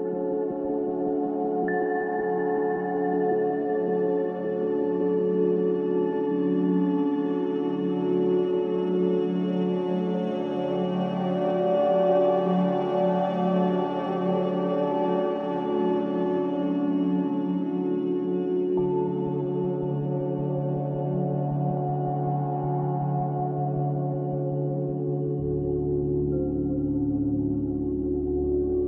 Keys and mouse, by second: 2.3-3.6 drag, 4.0 w, 5.6-6.0 middle drag, 6.2 Tab, 7.7-8.2 middle drag, 8.9 Tab, 9.6 Tab, 10.9-11.4 shift+middle drag, 11.8 Tab, 13.3 Tab, 13.7 Tab, 14.4 Tab, 16.9 click, 17.4-20.3 drag, 20.3 Tab, 20.8 Tab, 21.2 Tab, 22.1 Tab, 23.0 Tab, 23.6 Tab, 24.3 ctrl+z, 24.4 ctrl+z, 24.8 ctrl+z, 25.5 ctrl+z, 25.8 ctrl+z, 26.6 click, 26.9 click.